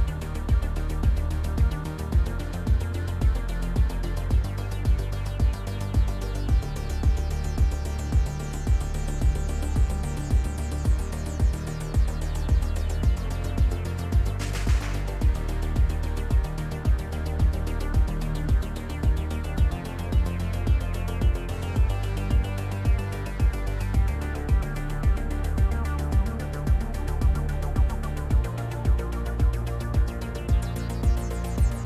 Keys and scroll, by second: 3.2 shift+space, 15.1 s, 16.8 v, 17.5 d, 18.9 d, 19.4 space, 23.8 s, 27.8-28.7 typing, 30.3 ctrl+z, 30.6 ctrl+z.